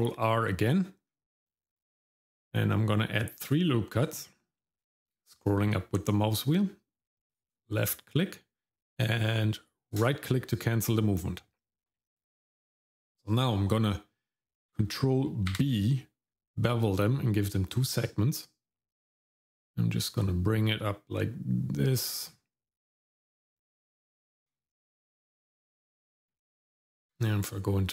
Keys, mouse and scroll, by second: 15.5 ctrl+b, 26.3 Tab.